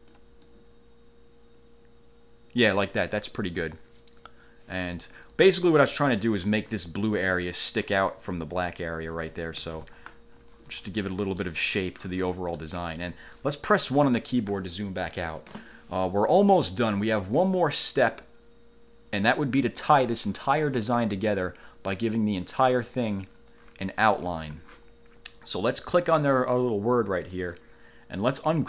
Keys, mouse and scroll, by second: 0.6-3.0 ctrl+drag, 5.4-5.9 ctrl+scroll up 2, 9.0 click, 9.6-10.4 ctrl+scroll down 2, 9.8 ctrl+z, 11.3 middle click, 12.8 middle click, 13.9 1, 14.6 click, 26.6 click.